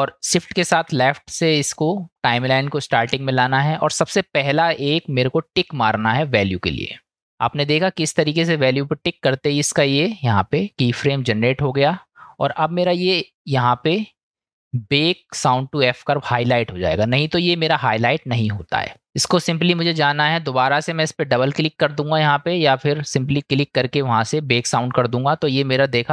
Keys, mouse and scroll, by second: 0.6 shift+Left, 7.1 click, 13.7-19.4 drag.